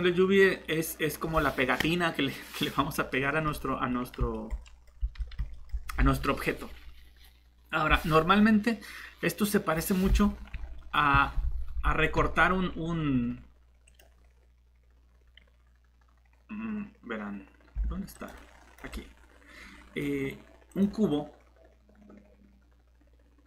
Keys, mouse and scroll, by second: 3.4 Tab, 5.0 shift+Tab.